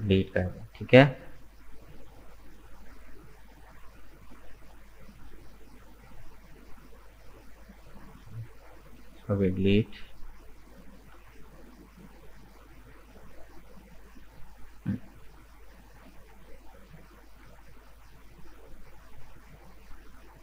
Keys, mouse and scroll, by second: 6.1 right click, 7.0 shift+right click, 7.9 shift+right click, 8.4 middle click, 9.4 Delete, 10.5-11.6 middle drag, 11.6 right click, 12.0-15.0 middle drag, 16.7 click, 17.1 scroll up 2, 18.4-19.5 middle drag, 19.5 right click, 20.0-20.4 middle drag.